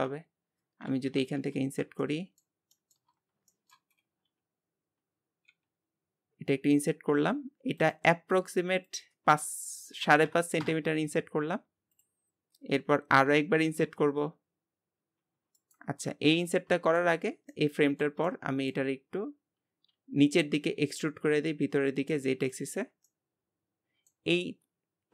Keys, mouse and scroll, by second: 1.1 KP_7, 1.4 Tab, 2.0-3.1 shift+middle drag, 3.1-3.5 scroll up 2, 3.5 shift+middle click, 4.0-4.9 scroll up 3, 4.9-5.5 scroll down 1, 8.9-13.9 drag, 13.9 i, 16.1 ctrl+z, 16.4 middle click, 17.2-17.5 scroll down 2, 17.5-19.1 shift+middle drag, 19.1-19.9 scroll up 1, 19.9 e, 22.7-23.1 scroll down 3, 23.1-25.1 middle drag.